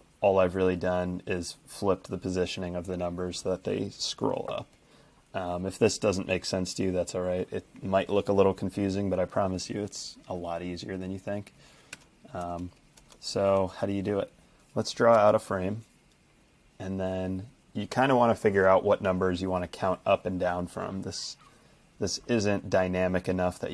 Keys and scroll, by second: 11.9 shift+Return, 12.4 shift+Return, 13.0 shift+Return, 15.2 f.